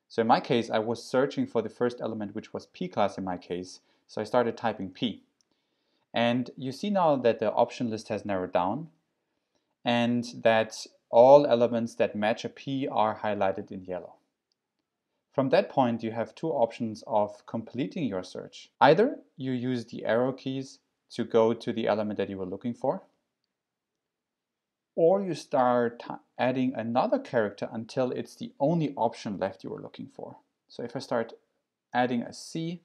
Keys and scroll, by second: 4.8 p, 22.5 Up, 31.9 c.